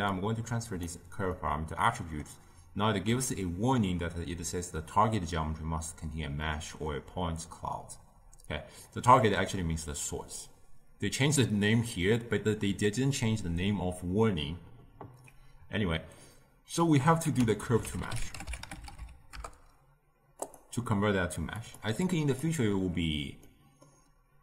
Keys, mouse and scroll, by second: 0.0 drag, 1.3-4.4 middle drag, 17.2 ctrl+a, 21.5 click, 22.0-23.4 drag, 23.4-24.4 middle drag.